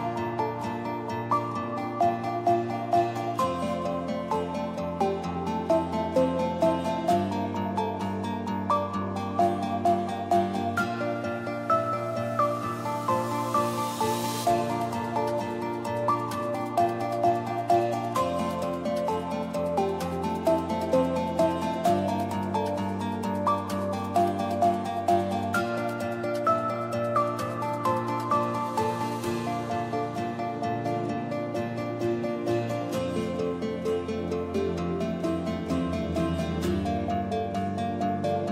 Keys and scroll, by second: 0.0-0.6 typing, 6.8-7.7 typing, 10.8 3, 11.1 0, 14.6 space, 32.7 space, 33.7 n, 33.9 w.